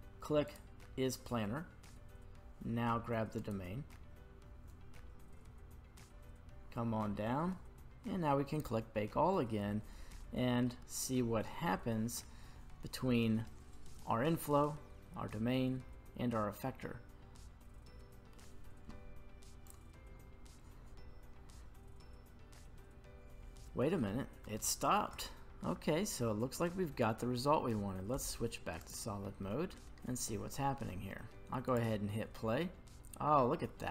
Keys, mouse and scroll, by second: 0.5 click, 3.4 right click, 5.5-6.5 scroll down 1, 6.5-10.2 scroll down 7, 10.2-10.7 middle drag, 10.8-11.2 middle drag, 11.8 middle click, 12.4-15.0 scroll down 1, 16.7-18.3 middle drag, 19.7-22.8 drag, 24.0 middle click, 24.6-25.1 shift+middle drag, 25.2 middle click, 25.9-26.4 scroll up 1, 26.4-27.6 scroll down 1, 27.6-28.1 scroll down 2, 28.1 z, 29.4 middle click, 31.6 click.